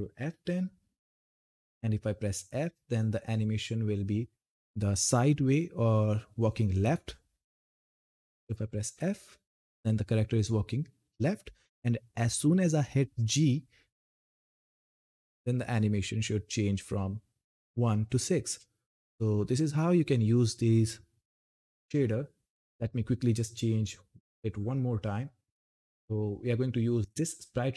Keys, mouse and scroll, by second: 1.5 s, 6.9 s, 14.8 g, 22.3 scroll down 1, 25.2 click, 26.0-26.5 scroll down 1.